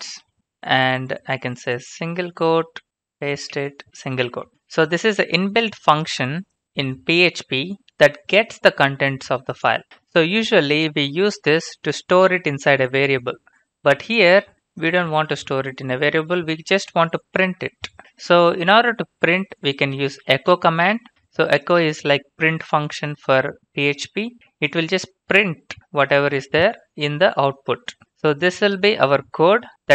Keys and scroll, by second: 0.0-4.2 typing, 1.2 Left, 19.5-21.5 typing.